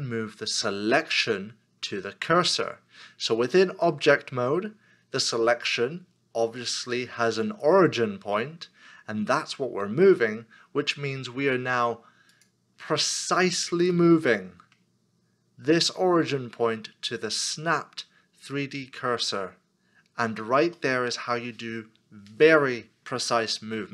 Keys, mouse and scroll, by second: 14.0 middle click, 20.8 middle click.